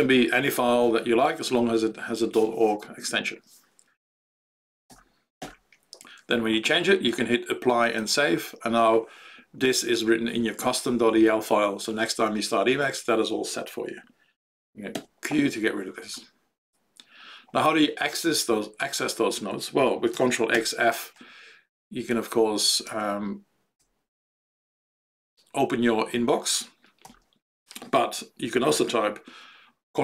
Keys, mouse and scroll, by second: 4.8 BackSpace, 5.3 g, 8.0 click, 14.9 q, 20.5 ctrl+f, 21.8 Down, 22.1 Tab, 22.5 Down, 22.8 Tab, 23.7 Down, 24.1 Down, 27.0 ctrl+g.